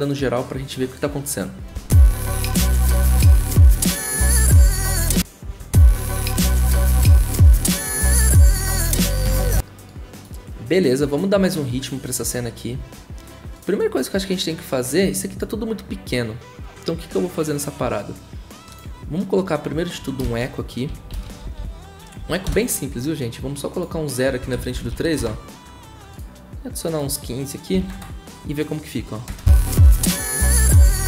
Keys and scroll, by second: 1.7 0, 5.0-5.4 typing, 20.6-22.2 typing, 22.4 ctrl+Return, 24.4 Right, 24.5 Left, 25.2 0, 27.5-29.3 typing.